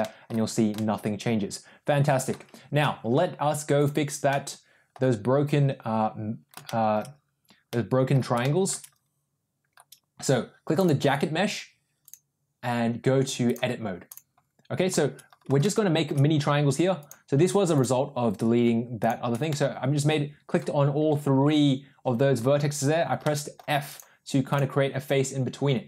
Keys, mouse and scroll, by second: 0.6-2.1 middle drag, 3.7 click, 6.6 shift+middle click, 7.7 middle click, 8.4 shift+middle click, 10.7 click, 11.9 click, 13.3 click, 15.6 shift+middle click, 16.9 click, 17.6 shift+click, 18.9 shift+click, 19.5-20.5 middle drag, 22.4 f, 23.1 middle click, 23.9 click.